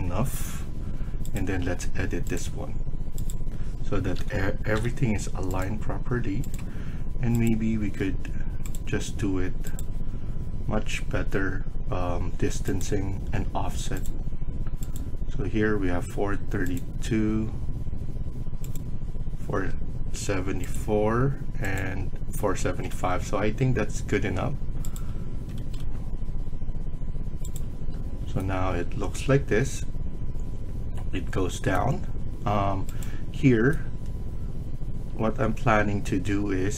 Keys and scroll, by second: 1.5 Escape, 1.7 Escape, 4.1-4.7 typing, 7.7 Escape, 8.0 Escape, 15.5 Escape, 19.4 Escape, 22.3 Escape, 22.7 Escape, 22.8 Escape, 25.2 Escape, 25.5 Escape, 25.7 Escape.